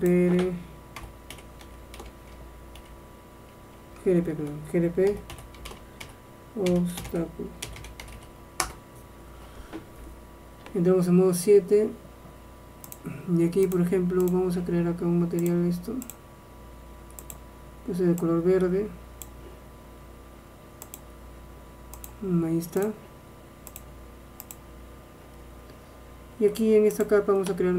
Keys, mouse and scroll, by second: 0.1-1.9 drag, 4.1 BackSpace, 10.7 KP_7, 11.3-12.1 scroll up 1, 13.0-19.1 drag, 21.0-25.5 drag, 27.1-27.7 drag.